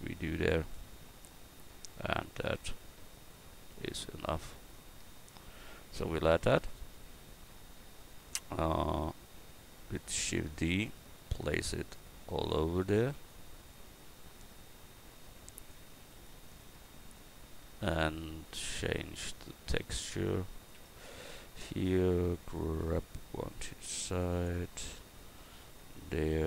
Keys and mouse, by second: 10.2 shift+d, 11.0-13.1 drag, 13.7-15.7 drag, 16.0 shift+d, 16.6-19.2 drag, 20.8 Tab, 22.8 g, 25.4 Tab.